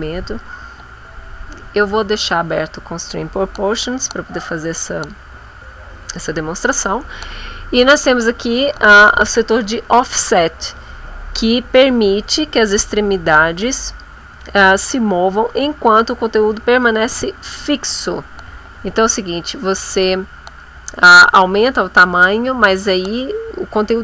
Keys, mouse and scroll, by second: 20.6 click.